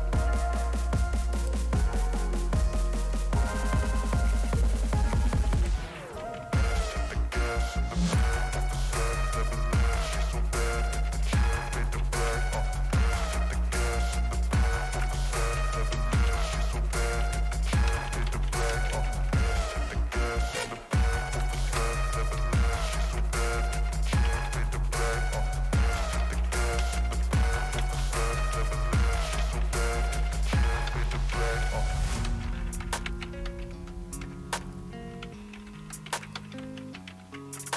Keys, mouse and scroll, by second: 0.0-0.1 typing, 1.3 click, 5.5 ctrl+click, 8.1 ctrl+click, 10.8-13.0 typing, 13.1 Return, 14.7-24.9 typing, 25.1 Return, 26.0-36.3 typing.